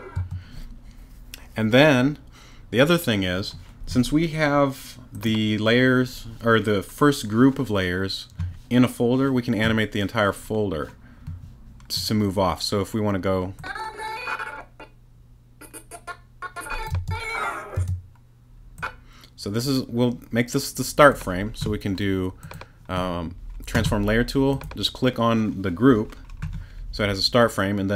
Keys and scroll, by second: 0.1 space, 16.9 space.